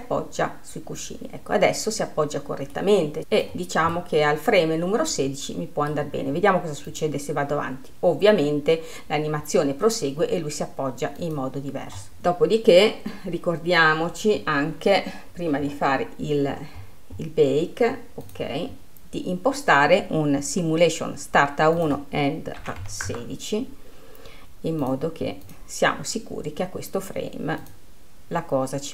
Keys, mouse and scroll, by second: 0.5-4.3 drag, 4.6-7.5 middle drag, 7.5-10.6 drag, 11.8 click, 12.7 click, 14.5-15.9 scroll down 6, 15.9-17.2 scroll down 4, 17.2 scroll up 1, 17.4-18.9 scroll down 5, 18.9 click, 19.4-22.4 scroll down 3, 22.4-28.9 drag.